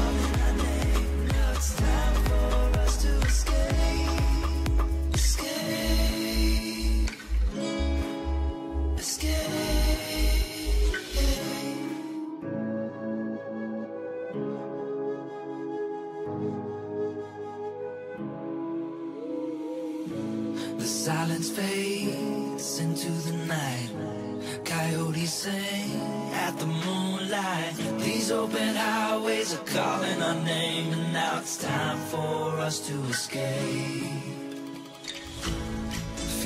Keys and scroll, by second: 8.3 n, 16.0 h, 33.7 h, 35.3 h.